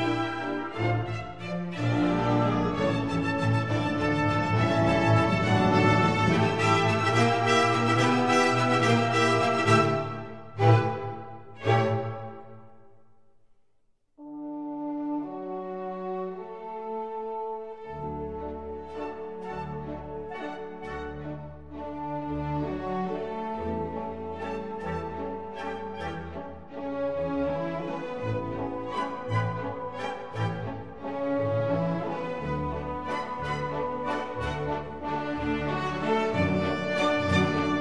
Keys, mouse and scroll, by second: 2.4-3.6 drag, 6.1-7.2 middle drag, 7.2-9.0 drag, 9.8 e, 13.8 s, 15.8 e, 19.3 s, 23.3 e, 27.4 e, 31.2-33.0 drag, 33.5 KP_1, 35.4-36.4 middle drag.